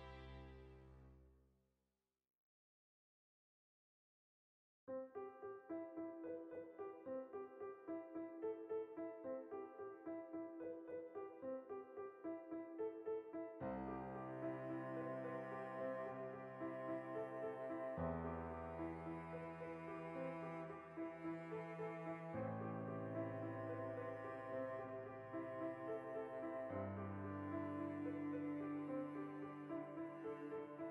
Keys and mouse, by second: 4.6-5.2 right drag, 5.2-10.9 shift+middle drag, 10.9 right click, 11.1-12.2 ctrl+shift+middle drag, 11.6 g, 12.2 click, 12.4-13.4 ctrl+shift+middle drag, 13.0 g, 13.4 click, 13.8 r, 14.7 shift+middle drag, 14.9 right drag, 15.0-20.8 ctrl+shift+middle drag, 16.5 b, 18.8 g, 20.8 shift+click, 21.1-22.0 ctrl+middle drag, 22.0 right click, 22.2-25.3 shift+middle drag, 23.8 Tab, 24.2 alt+q, 25.1 alt+q, 25.6-30.9 shift+middle drag.